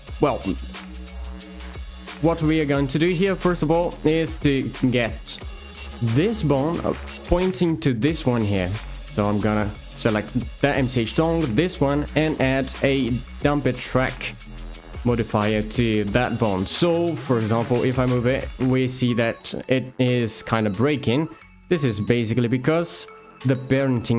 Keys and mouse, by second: 4.1 click, 12.3 d, 16.7 click, 17.1 g, 18.0-18.6 right drag, 18.8 ctrl+z, 21.2 Tab, 23.1 alt+click.